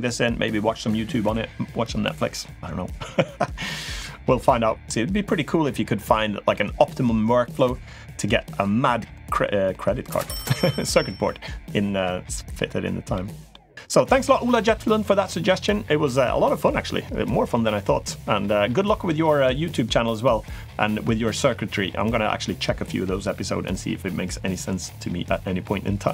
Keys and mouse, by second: 3.4 middle click, 4.2 middle click, 5.9 middle click, 12.9 middle click, 13.7 middle click.